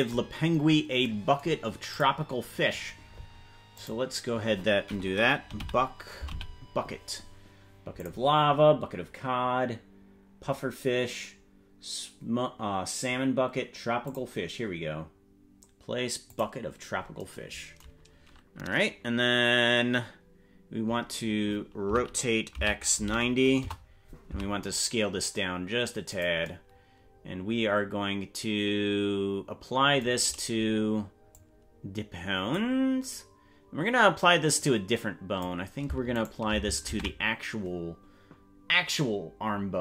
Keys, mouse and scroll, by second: 0.5-1.1 scroll up 9, 1.9 click, 3.9-8.1 drag, 10.1-10.6 scroll down 2, 11.4-12.0 scroll down 3, 14.2 click, 16.3 click, 21.8 r, 24.2 s, 31.3-32.5 drag, 34.5 click, 36.2 shift+right click, 37.0 ctrl+Tab.